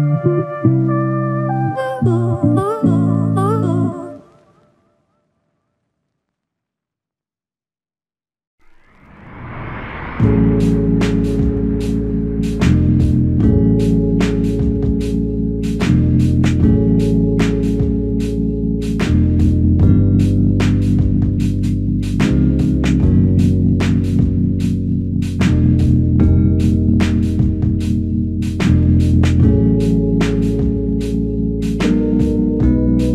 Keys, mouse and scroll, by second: 5.5 ctrl+click, 7.9 alt+click, 12.6 ctrl+click, 18.8 alt+click, 20.9 ctrl+z, 25.4 ctrl+click, 27.2 ctrl+click, 30.1 ctrl+click.